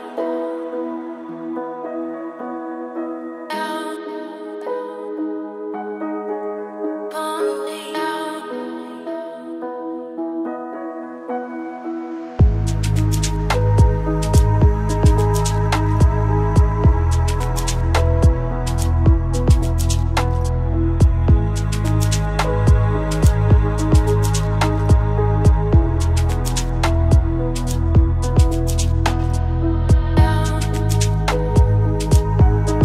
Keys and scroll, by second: 18.4 ctrl+space.